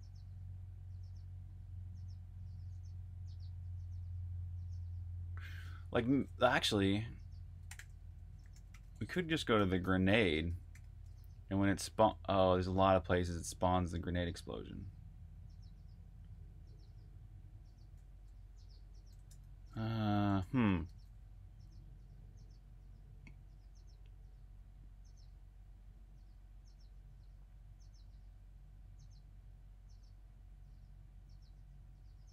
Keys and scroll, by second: 6.7-10.8 typing, 13.9 typing, 18.0 super+j, 19.2-20.7 typing.